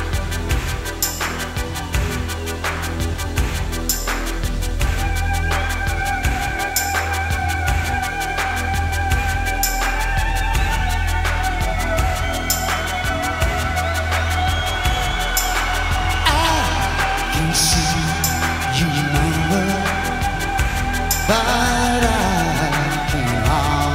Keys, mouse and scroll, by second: 2.2 shift+a, 8.5-16.3 drag, 14.6 s, 20.7 s.